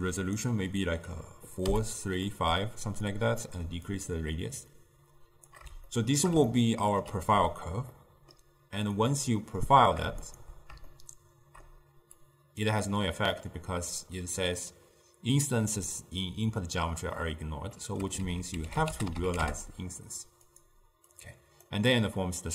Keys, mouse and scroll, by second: 0.3-2.0 drag, 2.4-3.2 middle drag, 3.2-6.0 drag, 6.0-9.1 shift+middle drag, 9.1-10.4 drag, 10.9-12.3 shift+middle drag, 12.3 click, 13.2-16.4 middle drag, 17.8 middle click, 18.3 ctrl+a, 21.2 click, 22.0-22.5 middle drag.